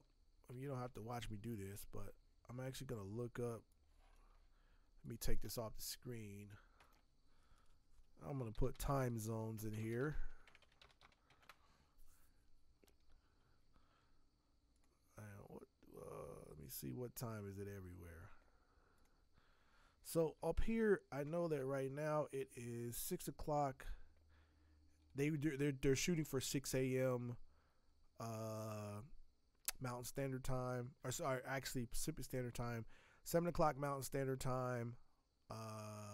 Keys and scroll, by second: 0.5 alt+Tab, 0.8 alt+Tab, 1.1 alt+Tab, 8.3-11.8 typing.